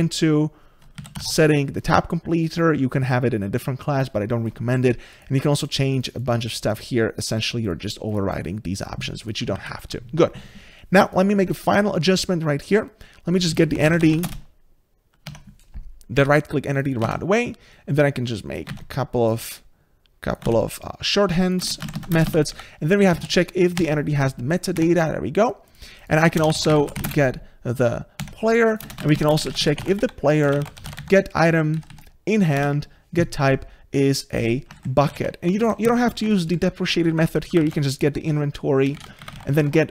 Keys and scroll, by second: 9.6 ctrl+z, 15.3 Tab, 18.5 ctrl+c, 18.7 ctrl+v, 23.8 Tab, 24.8 Tab, 32.6 Tab, 36.5 ctrl+shift+Right, 39.2 Return.